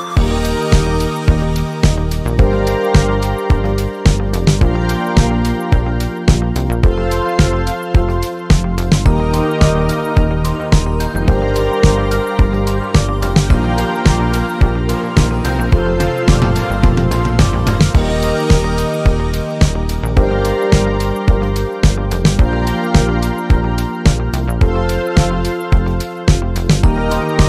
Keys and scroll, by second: 22.1 Delete.